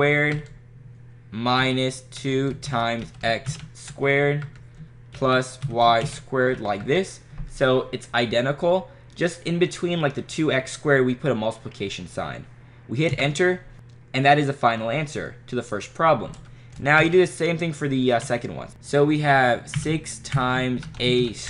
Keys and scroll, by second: 0.4 Right, 1.6-4.4 typing, 4.5 Right, 5.5-7.1 typing, 13.1 Return, 17.0 (, 18.3 6, 18.7 (, 19.8-21.4 typing.